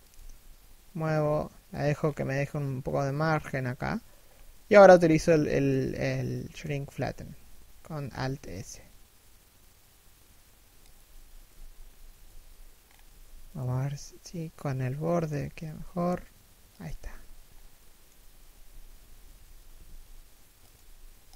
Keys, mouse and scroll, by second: 1.6-2.3 scroll up 1, 3.8-4.2 scroll down 1, 4.2 shift+middle click, 4.7-5.1 scroll down 1, 5.1 shift+middle click, 5.5-6.2 scroll up 1, 6.2 shift+middle click, 8.0 alt+s, 11.1 z, 11.4 scroll down 1, 11.9 z, 12.4 scroll up 1, 12.6 a, 13.1 alt+right click, 14.7-15.1 scroll down 1, 15.1 alt+s, 16.4 z, 17.0 scroll down 1, 17.3 middle click, 18.1 KP_3, 18.4 KP_1, 19.4 alt+s, 20.3 w.